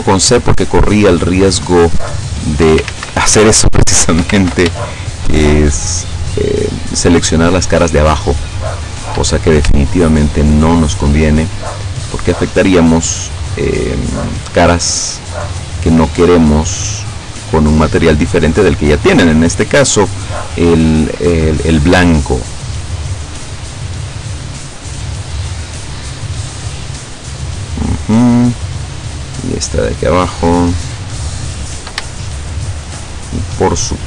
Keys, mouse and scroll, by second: 2.0 shift+right click, 3.0 ctrl+shift+z, 3.8 shift+right click, 4.4 ctrl+shift+z, 5.1 shift+right click, 5.8 shift+right click, 6.4 shift+right click, 7.0 shift+right click, 8.5 shift+middle click, 9.4 shift+scroll up 1, 10.2 shift+right click, 11.0-11.3 shift+scroll up 1, 11.9 shift+right click, 13.2 shift+right click, 15.0 shift+right click, 15.6 shift+right click, 16.2 shift+right click, 17.4 shift+right click, 18.3 shift+right click, 19.6 shift+right click, 20.3 shift+right click, 21.4 shift+click, 21.8 middle click, 22.0 shift+click, 22.2-23.2 shift+middle drag, 25.2 shift+right click, 26.0 shift+right click, 26.6 shift+right click, 27.4 shift+right click, 28.5 shift+right click, 29.0 shift+right click, 29.7 shift+right click, 30.3 shift+right click, 31.0 shift+right click, 31.6 shift+right click, 32.2 shift+middle click.